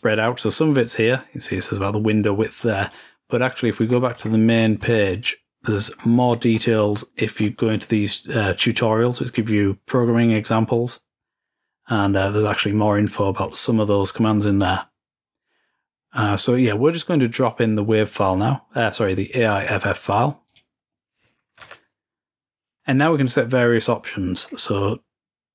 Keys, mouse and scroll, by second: 0.0-0.9 scroll up 2, 1.2-3.9 drag, 3.4-5.1 typing, 5.6-6.0 scroll up 1, 6.0-8.3 scroll down 2, 7.0 typing, 11.8-13.6 scroll up 3, 13.6-14.2 scroll up 1, 14.2 scroll up 1, 14.4 click, 15.5-16.3 scroll down 2, 16.3-17.2 scroll up 2, 17.9-21.1 drag, 23.4-24.3 scroll down 3, 24.3-25.1 scroll up 2.